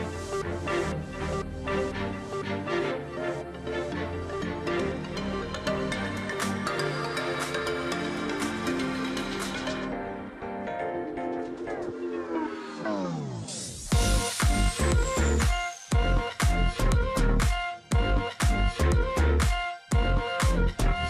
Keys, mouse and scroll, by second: 0.3 shift+click, 2.0 shift+x, 3.4 alt+scroll down 1, 4.1 space, 4.4 alt+scroll down 1, 4.5 space, 5.2 alt+scroll up 1, 5.7 space, 6.6 ctrl+click, 7.6 space, 8.7 space, 10.5 shift+x, 10.9 ctrl+click, 14.2 ctrl+click, 14.3 ctrl+space, 15.6 ctrl+z, 16.0 ctrl+click, 16.1 ctrl+space, 16.3-17.1 ctrl+scroll up 3, 16.7 alt+space, 17.6 ctrl+click, 18.9 ctrl+click, 20.6-21.0 alt+scroll up 1.